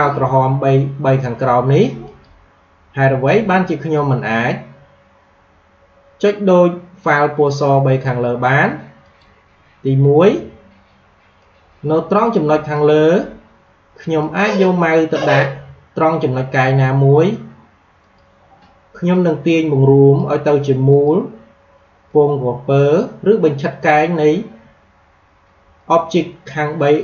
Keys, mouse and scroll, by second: 8.9 click, 11.3-17.3 drag, 17.9-25.2 drag.